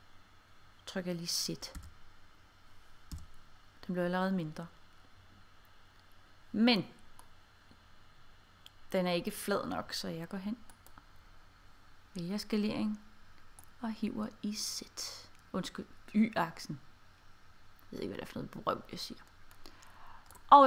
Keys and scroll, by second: 1.8 z, 3.2 1.